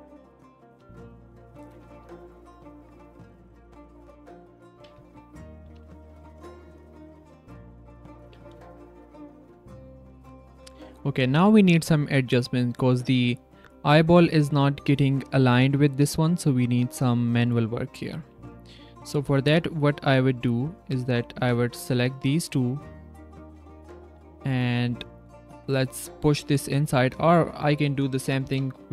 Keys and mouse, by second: 0.7 g, 1.6 r, 5.4 r, 5.6 g, 6.9 drag, 7.2 g, 8.7 shift+middle click, 9.0-9.4 middle drag, 9.6 shift+middle click, 9.9-10.4 middle drag, 10.6 drag, 11.7-12.4 drag, 15.5 r, 16.5 r, 17.7 drag, 18.8 drag, 19.1 Tab, 19.5 click, 20.8 shift+click, 21.0 click, 21.6 z, 21.9 z, 22.2 click, 23.4 click, 23.7 g, 26.6 Tab, 28.4 h.